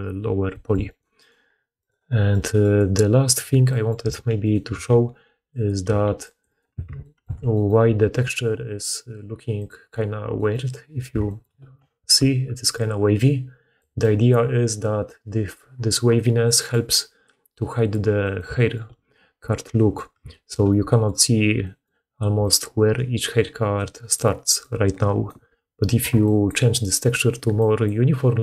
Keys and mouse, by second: 0.3 middle click, 0.7 click, 1.0 click, 1.7 click, 2.2 click, 2.5-3.9 drag, 3.2 Tab, 3.9 a, 4.5-6.3 middle drag, 4.6 g, 5.7 g, 6.5 middle click, 6.6 Tab, 6.8 click, 7.0 middle click, 7.1 click, 7.2 alt+a, 8.0-9.3 drag, 9.4 click, 11.0-12.0 shift+middle drag, 12.0-13.8 d, 12.6-17.3 drag, 13.8-17.3 middle drag, 13.8-17.3 right drag, 15.4 d, 15.5 d, 15.6 d, 22.2-24.4 d, 25.1 d, 25.2 d, 25.3 d, 27.2-28.2 d.